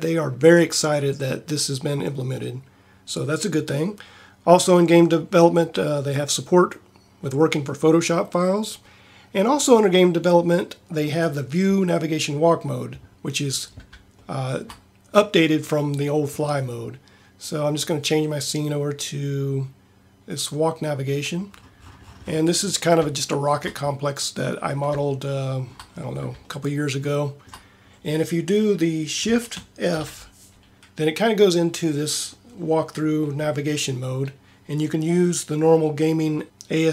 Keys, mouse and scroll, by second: 30.1 shift+f.